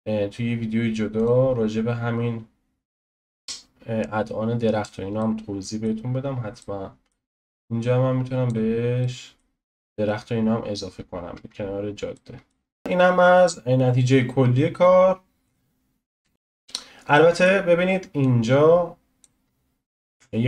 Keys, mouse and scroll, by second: 3.5 click, 12.8 space, 16.2 space, 17.4 middle click, 18.2-19.4 drag, 19.4 scroll up 3, 19.9-20.4 shift+middle drag.